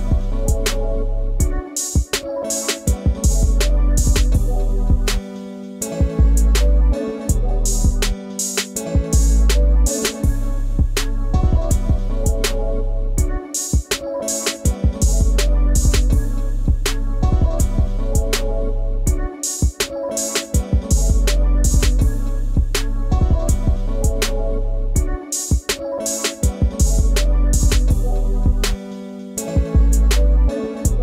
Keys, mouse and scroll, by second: 0.0 click, 0.5 click, 0.9 shift+click, 1.5 g, 3.7-5.0 middle drag, 5.0-7.4 drag, 7.7-8.9 middle drag, 8.9 click, 9.3-11.5 middle drag, 11.5 shift+a, 13.0-13.7 middle drag, 13.7 s, 16.7 x, 18.0-19.5 middle drag, 19.5 click, 20.6 click, 21.5 click, 23.3 click, 24.4 click, 26.4-26.8 drag, 27.6 click, 29.6 click.